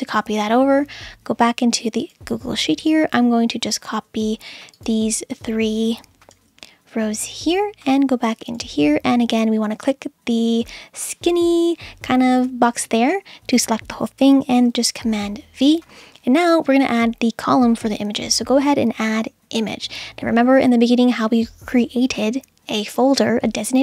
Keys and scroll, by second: 6.3 super+c, 15.0 super+v.